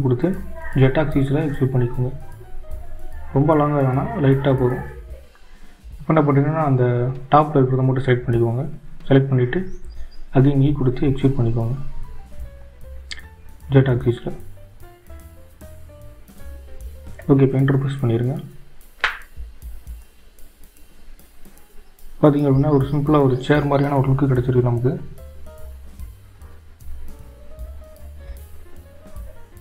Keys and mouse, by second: 1.4 e, 8.1 click, 12.8 shift+click, 14.6 e.